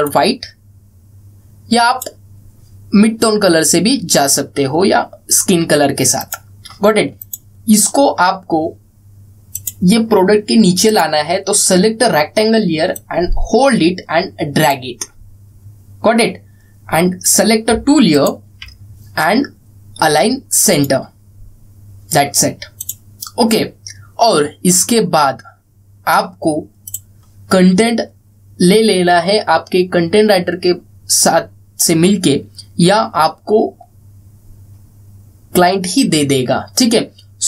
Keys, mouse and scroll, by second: 6.9 click, 10.2-17.6 drag, 13.9-15.5 drag, 18.4 click, 27.6 click.